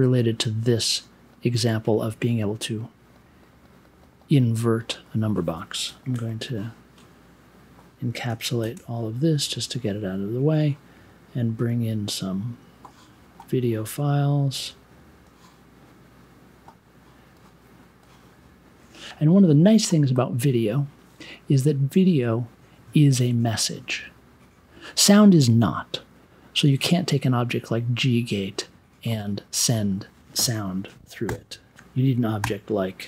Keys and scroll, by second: 8.5 shift+super+e, 30.6 BackSpace, 32.4-33.0 typing.